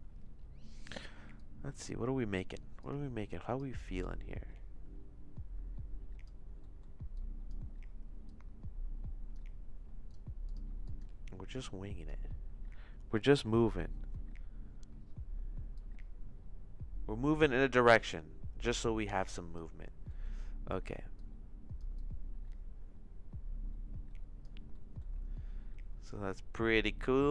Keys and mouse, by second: 1.4 click, 2.8 click, 4.0-6.2 drag, 6.7 middle click, 7.1 click, 8.3-9.3 drag, 10.2 click, 10.8 click, 11.6 click, 15.8-19.5 drag, 20.2 middle click, 21.1 click, 22.0-24.4 drag, 24.7 middle click, 26.5 middle click.